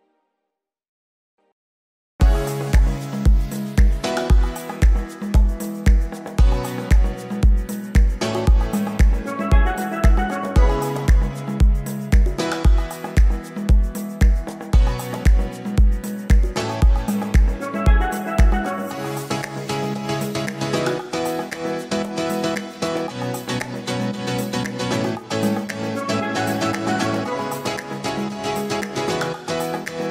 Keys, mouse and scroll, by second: 7.2-8.4 scroll down 1, 8.4-11.2 scroll down 1, 11.2-15.3 scroll down 1, 15.3-16.3 scroll down 1, 16.3-17.8 scroll down 1, 17.8-21.4 scroll down 1, 21.4-22.1 scroll down 1, 22.1-27.8 scroll down 1, 27.8-30.1 scroll down 1.